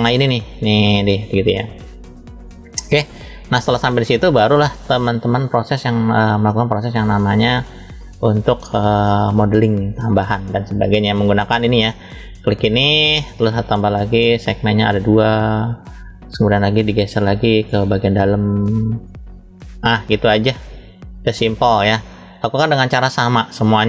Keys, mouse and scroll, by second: 2.0-3.9 middle drag, 5.4 click, 5.7 click, 6.4 middle click, 7.8 scroll down 1, 8.5-9.0 scroll up 1, 9.0 scroll up 1, 9.2 shift+middle click, 11.6 click, 12.9 click, 14.0 click, 15.0 click, 16.2 click, 17.1 middle click, 18.5 click, 20.0-22.3 middle drag.